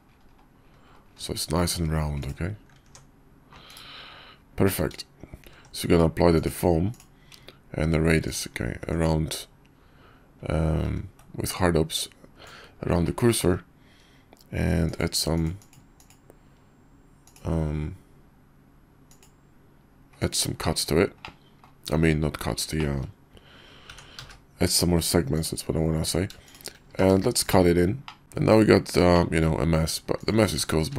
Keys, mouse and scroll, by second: 2.9 Tab, 3.7 /, 5.4 ctrl+`, 10.9 ctrl+`, 15.2-20.3 drag, 21.2-21.6 drag, 22.2 KP_5, 22.8 shift+middle click, 23.9 g, 27.6 q, 28.0 middle click, 28.2 `, 28.6 KP_5, 29.1 shift+middle click, 30.2 click, 30.8 q.